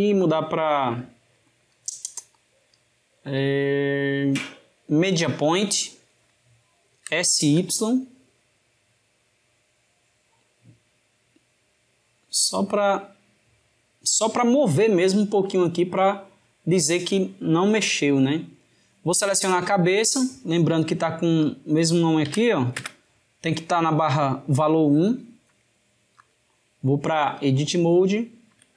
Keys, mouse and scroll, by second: 0.0-3.1 drag, 15.2-17.1 drag, 21.3-24.1 drag, 26.0-27.8 drag, 27.8-28.7 shift+middle drag.